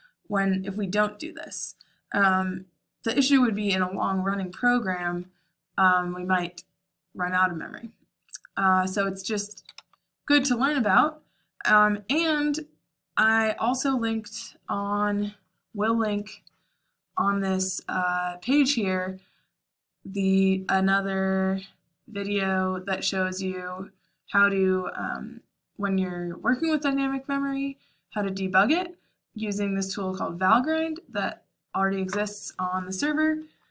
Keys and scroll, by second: 9.5-10.3 typing.